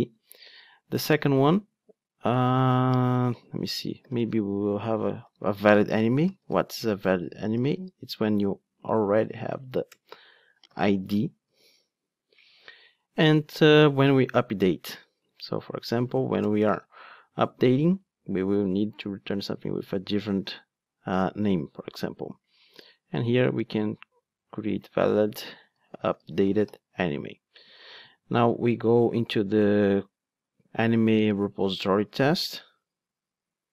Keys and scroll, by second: 0.2 super+c, 1.2 super+v, 15.3 super+c, 16.8 super+v, 28.0 super+c.